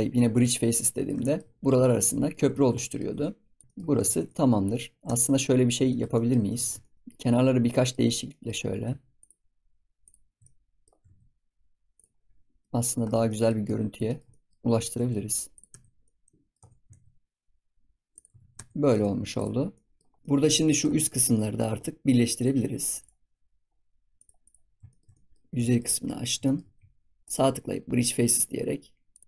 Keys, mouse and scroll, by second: 0.7 middle click, 1.4 scroll up 3, 1.7 click, 1.9-3.5 middle drag, 3.5 shift+click, 3.6 shift+middle click, 3.7 scroll up 1, 3.9 scroll down 1, 4.0 ctrl+s, 4.2 middle click, 4.9 scroll up 2, 5.0 Tab, 5.4-5.8 scroll up 3, 5.8 shift+middle click, 6.4 ctrl+s, 6.7 shift+middle click, 7.1 scroll up 3, 7.4 middle click, 8.0 scroll down 2, 8.2 middle click, 8.5-9.1 scroll up 2, 9.1 shift+click, 9.9 shift+click, 10.4 scroll up 1, 10.4 middle click, 10.9 s, 12.1-12.6 scroll down 1, 12.6 middle click, 13.0 scroll up 2, 13.0 middle click, 13.2 shift+middle click, 13.7-14.0 scroll up 2, 14.0 shift+middle click, 14.8 s, 15.6 Tab, 16.0 middle click, 16.5 Tab, 16.8 s, 18.3 ctrl+s, 18.5 Tab, 18.9 ctrl+s, 19.0-19.6 scroll down 6, 19.3 click, 19.7-20.0 middle drag, 20.0 scroll up 4, 20.2-21.5 middle drag, 21.5-22.3 scroll up 3, 22.3-27.9 drag, 27.9-29.2 right drag.